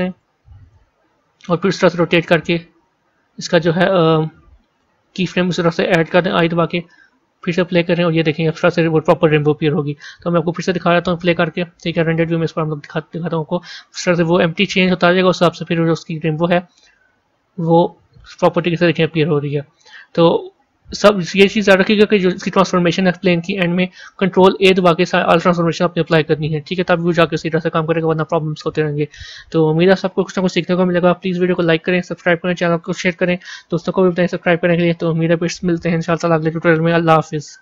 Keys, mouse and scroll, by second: 0.1-1.7 drag, 1.7 r, 7.4-12.1 drag, 12.1 z, 13.2 a, 15.2 click, 18.9-20.4 drag, 20.4 z, 22.6 click, 25.3 ctrl+a, 26.1-30.7 middle drag.